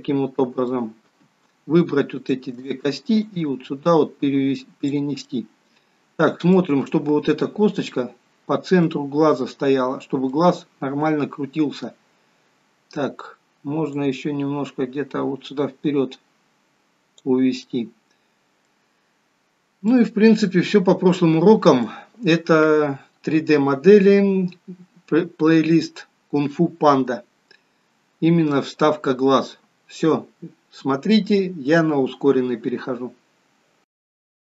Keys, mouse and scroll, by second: 2.2 shift+click, 3.3 click, 5.3 middle click, 7.0 scroll up 2, 7.8 middle click, 7.8 scroll up 1, 9.8 scroll down 2, 10.4 middle click, 12.2-13.0 scroll down 1, 14.0 click, 17.7 middle click, 19.0 scroll up 2, 19.5-19.9 scroll down 2, 19.9 middle click, 20.6-21.0 scroll down 2, 21.2 middle click, 34.0 click, 34.4 click.